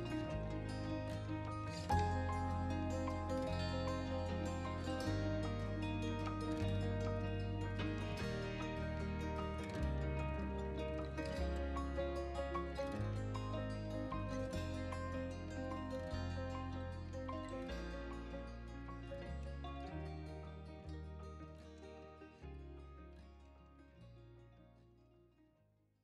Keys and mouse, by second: 0.7 Tab, 1.8-3.0 drag, 3.6 r, 3.9 x, 8.1 click, 9.9-14.8 middle drag, 15.4 middle click, 16.4 shift+s, 18.8 Tab, 19.4 middle click, 20.1 KP_3, 21.4 g, 21.8 Escape, 23.0 click, 24.5 g, 25.8 shift+x.